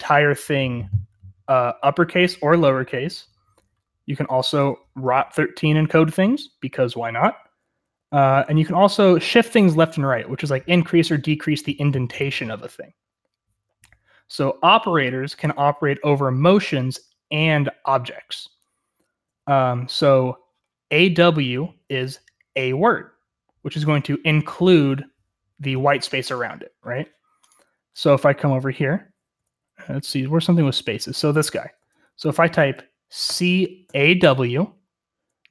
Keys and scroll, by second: 4.2 j, 4.4 j, 4.5 j, 7.5-8.8 typing, 16.9-19.3 j, 19.4 k, 19.8 k, 28.2 k, 29.3-31.8 typing, 33.2-34.3 typing.